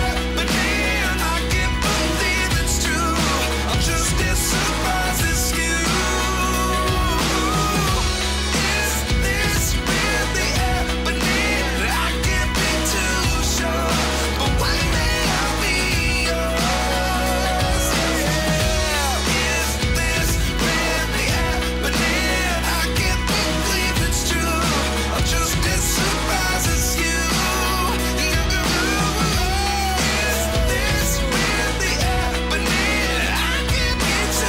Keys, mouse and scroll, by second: 0.1 click, 0.5 click, 2.7-3.0 drag, 5.5 shift+a, 7.2 g, 7.4 middle click, 7.7 click, 8.7 click, 9.3-10.4 drag, 11.9 Tab, 12.3 f, 14.9 click, 16.1 Tab, 16.4 g, 16.5 middle click, 18.0 g, 18.2 middle click, 19.8 click, 19.9 s, 20.7 g, 21.0 middle click, 21.2 click, 22.3 g, 22.6 middle click, 23.7 click, 24.3 r, 25.8 r, 26.9 s, 27.8 g, 28.1 middle click, 29.1 s, 29.3 middle click, 30.8 click, 31.7 click, 32.2 Tab, 33.3 ctrl+b.